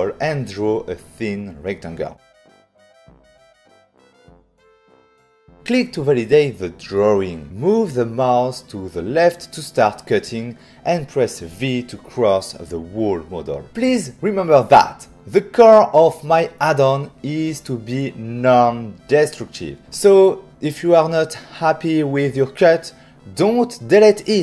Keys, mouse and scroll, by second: 2.2 click, 5.5 shift+click, 10.3 v.